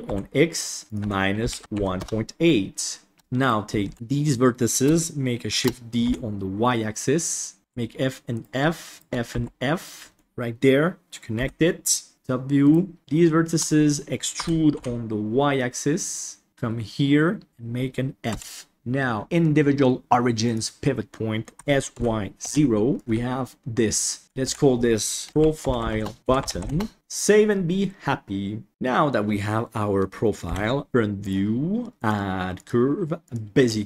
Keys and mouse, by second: 0.8-2.0 drag, 3.4 right click, 3.8 alt+a, 3.9 b, 5.5 shift+d, 7.6 ctrl+z, 7.6 f, 8.3 right click, 8.9 shift+right click, 9.3 f, 9.9 middle click, 11.3 KP_1, 12.1 KP_7, 12.6 right click, 13.2 shift+middle click, 14.3 e, 18.3 f, 18.7-20.5 drag, 21.5 s, 22.9 s, 23.0 Tab, 24.4 F2, 26.2 shift+o, 26.2 BackSpace, 26.9 ctrl+s, 28.7-29.1 middle drag, 30.4 KP_1, 32.0-33.3 drag.